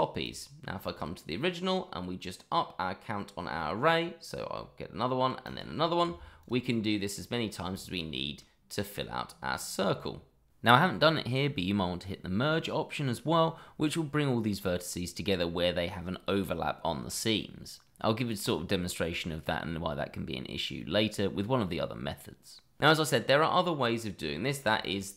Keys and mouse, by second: 0.2 click, 4.2 click, 5.4 click, 6.4 click, 6.7-7.1 middle drag, 7.7 shift+middle drag, 8.4-8.9 middle drag, 9.5-9.8 shift+middle drag, 24.4 shift+middle drag, 24.8 click.